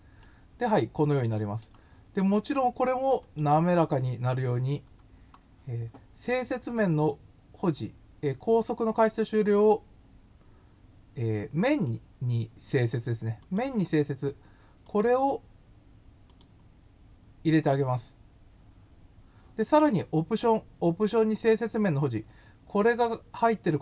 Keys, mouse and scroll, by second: 0.2-1.6 middle drag, 3.2 click, 4.5-5.2 scroll up 2, 6.9 click, 13.4 click, 14.8 click, 16.3 click, 18.5 scroll up 3.